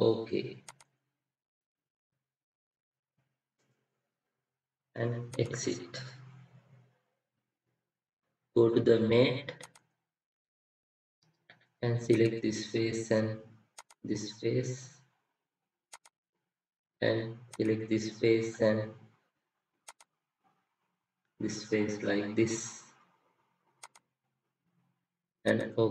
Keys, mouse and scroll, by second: 18.4 middle click, 21.0 scroll up 1, 21.2 middle click, 22.7-24.7 scroll down 1.